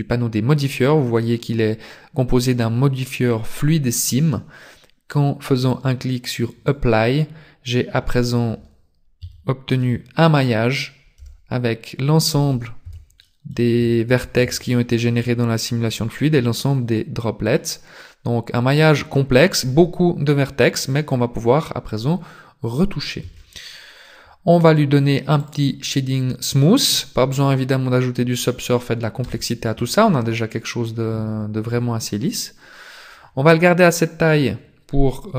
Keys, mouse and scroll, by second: 5.7 click, 9.3 Tab, 9.8 middle click, 11.2 z, 12.3 z, 12.8 a, 13.3 middle click, 13.9-14.4 scroll up 5, 14.6 shift+middle click, 15.2 scroll down 1, 15.4-16.0 scroll up 3, 15.6 middle click, 18.0 middle click, 18.8-19.7 scroll down 1, 19.8-21.2 scroll down 1, 21.4-22.2 scroll down 2, 22.2-23.2 scroll up 2, 23.2 Tab, 23.2-24.0 scroll up 1, 25.4 click, 29.2 KP_0, 30.1 scroll down 4.